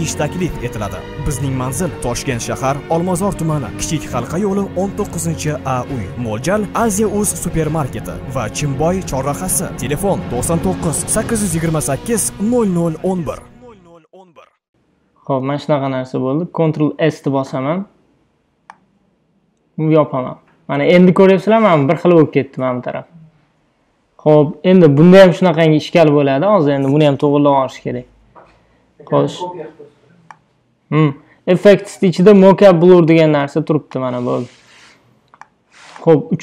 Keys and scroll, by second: 6.8 a, 16.9 super+s.